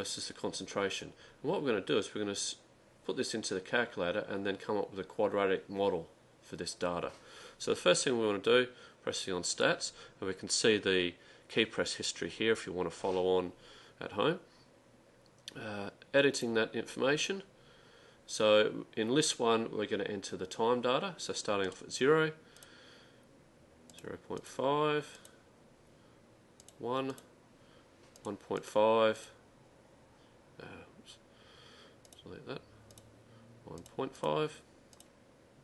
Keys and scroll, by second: 16.4 Return, 21.7 0, 22.7 Return, 24.0 ., 24.5 5, 25.3 Return, 26.7 1, 27.1 Return, 28.3 1, 29.3 5, 32.1 Delete, 33.0 (, 33.9 ., 34.2 5, 35.1 Return.